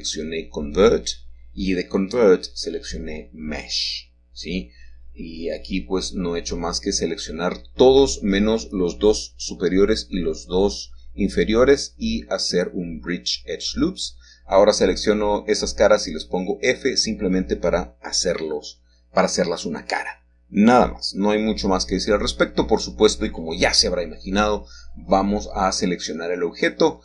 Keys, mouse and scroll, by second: 2.9 F3, 4.5 Return, 6.5-8.0 shift+middle drag, 8.4-9.5 shift+middle drag, 9.9 click, 11.0-12.1 shift+middle drag, 19.2-20.0 shift+scroll down 1, 20.0 shift+middle click, 20.4-21.4 scroll down 1, 20.5-21.6 middle drag, 22.2 shift+middle click, 22.8-23.9 middle drag, 24.4 shift+middle click, 26.7-27.0 middle drag.